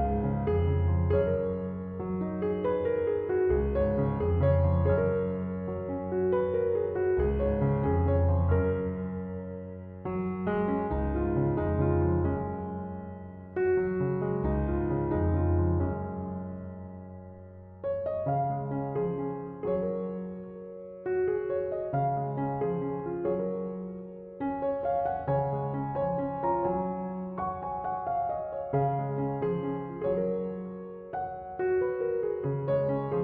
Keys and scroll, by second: 19.9 typing.